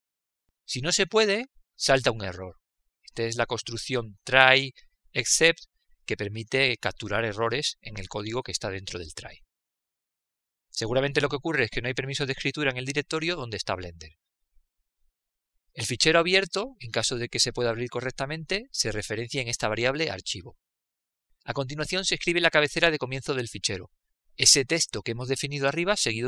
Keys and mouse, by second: 0.3 click, 2.9-8.5 drag, 22.1-26.2 middle drag.